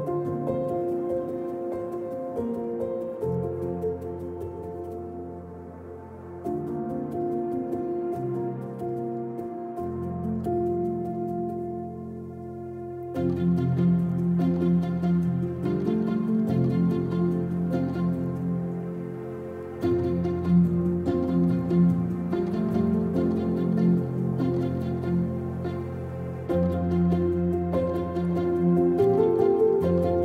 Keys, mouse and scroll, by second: 1.9 scroll up 1, 2.2 click, 3.1-5.0 middle drag, 4.5 KP_0, 4.6-5.0 scroll down 2, 5.0-5.4 drag, 5.1 scroll up 2, 5.2 scroll down 2, 5.4-12.6 right drag, 6.0-6.6 scroll down 2, 7.9 scroll up 2, 8.1 scroll down 2, 8.2 scroll up 2, 12.6-14.2 drag, 14.2 middle click, 14.3 scroll up 2, 14.6-15.3 drag, 15.3 middle click, 15.5 z, 15.5 click, 15.8 middle drag, 16.0 click, 16.3 middle drag, 16.5 z, 16.6 click, 16.8 z, 17.3 middle click, 17.4 click, 17.7 middle drag, 17.9 click, 18.2 middle click, 18.3 click, 18.9 shift+middle click, 19.3 scroll up 2, 19.5 click, 19.6 middle click, 19.7 ctrl+z, 19.8-20.3 drag, 20.0 ctrl+z, 20.3 middle click, 20.4-21.0 drag, 21.0 middle click, 21.1 click, 21.9 middle click, 21.9 click, 22.1 middle drag, 22.3 click, 22.4 middle drag, 22.4 click, 22.6 middle click, 22.7 click, 23.5 middle click, 23.6-24.0 drag, 24.0 middle click, 24.1-24.4 drag, 24.4 middle click, 24.7 click, 24.8 middle click, 25.0 click, 25.1 shift+middle click, 25.7 drag, 26.0 middle click, 26.1 click, 26.8 shift+middle click, 27.3-29.8 drag, 29.8 middle click, 30.0 click.